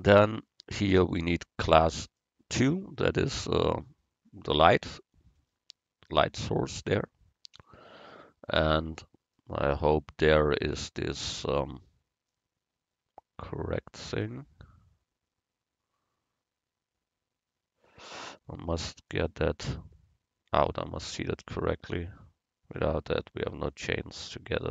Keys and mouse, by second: 1.5 middle click, 2.1 right click, 2.8 Tab, 7.6 z, 13.3 middle click, 19.7 middle click, 21.5 a, 23.0 l, 23.7-24.7 drag.